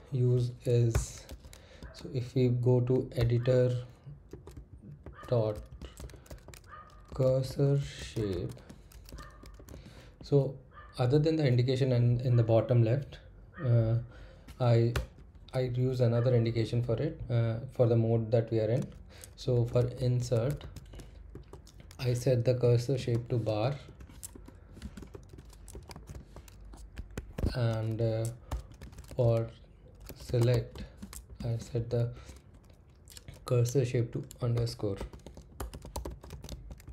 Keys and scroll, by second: 0.7-10.9 typing, 14.9 Return, 19.4-21.8 typing, 22.9-26.6 typing, 27.1 Escape, 28.2-32.4 typing, 34.3-36.9 typing.